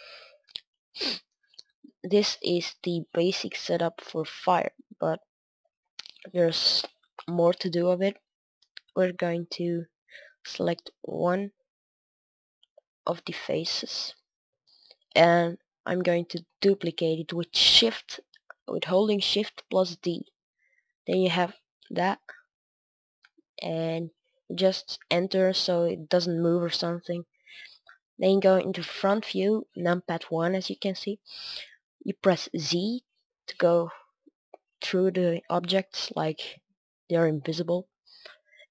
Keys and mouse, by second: 1.5-11.0 middle drag, 11.0-14.4 right drag, 14.4 KP_1, 16.5 shift+d, 21.7-26.3 middle drag, 26.4 middle click, 27.0 KP_1, 27.1-29.0 middle drag, 32.1 middle click, 32.5 z, 34.1-35.7 middle drag, 36.0-38.7 middle drag, 36.7 KP_1.